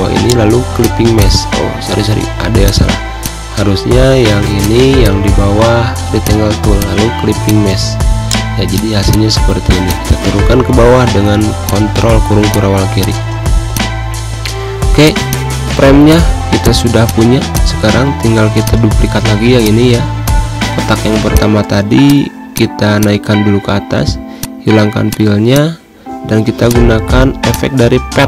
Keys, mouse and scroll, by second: 0.5 click, 1.8 ctrl+z, 2.3 click, 4.3-5.9 drag, 8.0 right click, 8.4 click, 10.3 ctrl+shift+[, 11.1 z, 11.3 click, 14.0 ], 14.7 click, 15.0 click, 15.3-17.4 typing, 15.8 click, 16.3 click, 16.7 click, 17.2 click, 18.3 click, 23.3 ctrl+shift+], 24.0 space, 24.1 click, 24.3 space, 24.8 click.